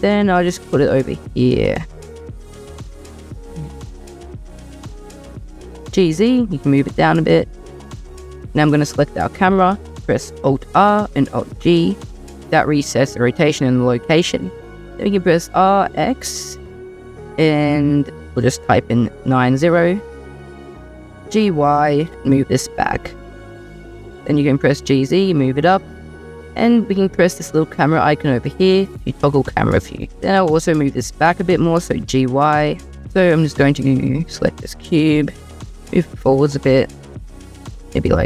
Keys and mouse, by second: 0.7 g, 2.4 y, 5.9 g, 5.9 z, 10.6 alt+r, 11.3 alt+g, 15.1 r, 15.6 x, 19.1 9, 19.4 0, 20.4 middle click, 21.0 g, 21.9 y, 24.7 g, 24.7 z, 25.5 click, 28.5 click, 30.1 g, 30.1 z, 31.7 g, 32.0 y, 34.0 click, 35.5 g, 35.8 x, 36.6 y, 38.0-38.2 drag.